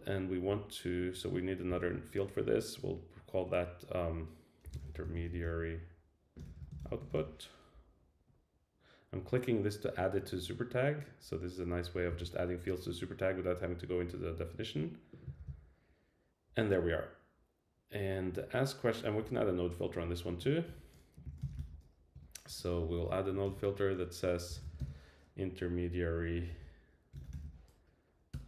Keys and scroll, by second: 12.1 super+c, 15.4 super+v, 20.7 Return, 22.1 Return, 22.5 Right, 28.3 Return.